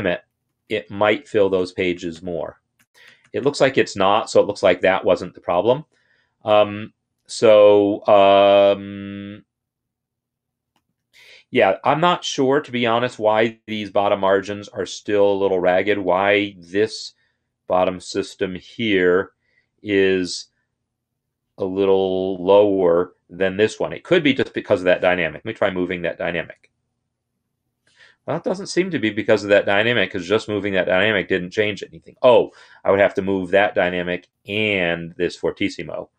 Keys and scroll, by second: 26.2 ctrl+Up, 27.2 ctrl+Down, 32.6 ctrl+Up, 33.4 ctrl+Up.